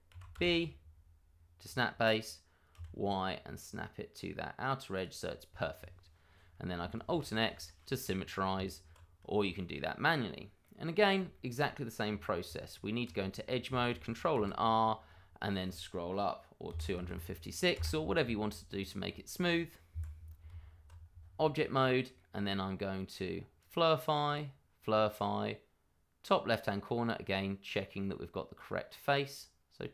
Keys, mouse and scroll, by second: 0.1 g, 0.3 b, 1.5 click, 2.7 y, 4.9 click, 5.1-5.5 scroll down 1, 6.9 alt+x, 7.5 shift+middle click, 7.6 middle click, 7.7 shift+middle click, 8.5 Tab, 9.3 shift+middle click, 9.4 middle click, 9.5 shift+middle click, 9.6-10.3 scroll up 1, 10.3 middle click, 10.9-11.3 scroll down 1, 11.3 shift+middle click, 11.6 middle click, 11.9 scroll up 1, 12.0 middle click, 12.4 Tab, 13.2 shift+middle click, 14.3 ctrl+r, 15.0-16.7 scroll up 1, 16.7 KP_2, 16.8 KP_5, 17.0 KP_6, 17.7 Return, 18.5 Tab, 19.9 Escape, 20.9 Tab, 21.2-21.8 scroll down 1, 21.8 middle click, 23.6 click, 26.8 middle click.